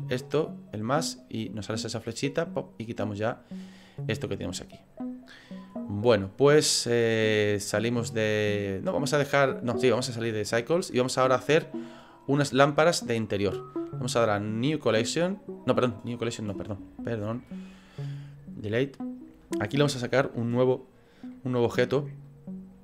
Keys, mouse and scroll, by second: 5.8 scroll down 2, 10.6 click, 12.7 right click, 16.1 click, 17.2 right click, 21.3 middle click, 22.2 click.